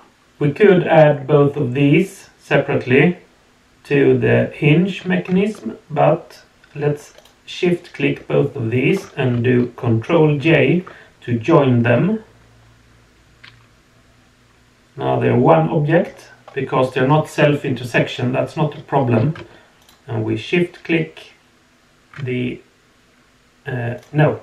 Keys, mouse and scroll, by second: 7.1 shift+click, 10.4 ctrl+j, 11.8-16.0 middle drag, 19.8 shift+click, 23.9 click.